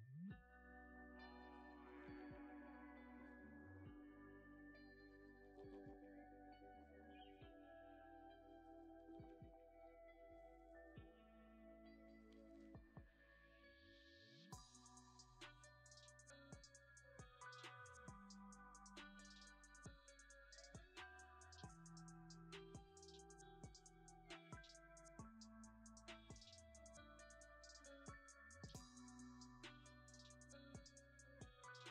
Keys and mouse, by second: 3.9 click, 5.9 click, 6.8 click, 11.7 shift+a, 15.1 r, 15.5 ctrl+right click, 15.7 g, 15.9 click, 16.5 g, 16.7-18.2 drag, 26.5 right click, 27.1 right click, 30.5-31.9 right drag.